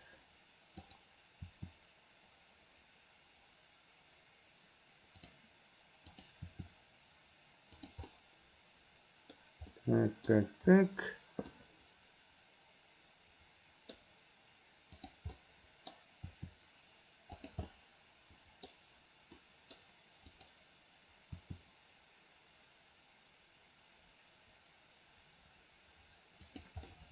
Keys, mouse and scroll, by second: 0.8 click, 1.5 r, 6.1 click, 6.5 r, 8.1-9.4 middle drag, 9.8-10.4 middle drag, 11.6-14.0 middle drag, 15.0 click, 15.4-16.0 middle drag, 16.3 r, 17.7-18.7 middle drag, 19.5-19.8 middle drag, 21.4 r, 26.9-27.1 middle drag.